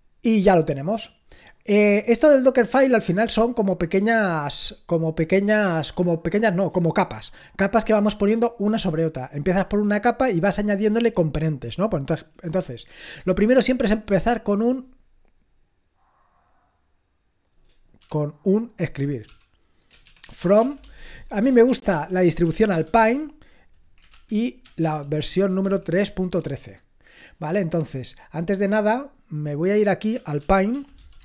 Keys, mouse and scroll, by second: 2.4-13.1 scroll down 1, 13.1-13.5 scroll down 1, 13.5 f, 18.0 i, 19.2-26.3 typing, 29.0 click, 29.6 click, 29.9-31.2 typing.